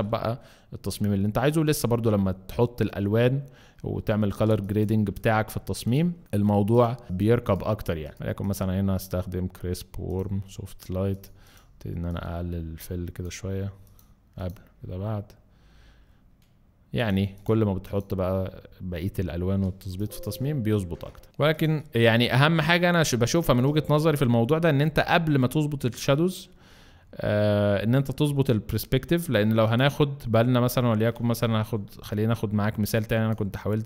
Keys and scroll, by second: 4.4 space, 19.8 space, 23.1 alt+space, 23.7 alt+space.